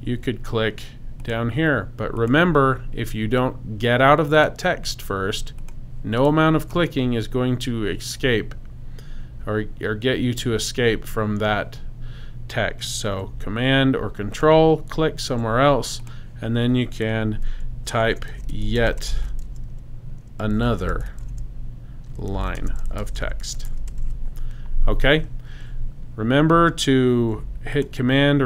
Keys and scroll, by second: 17.8-24.5 typing.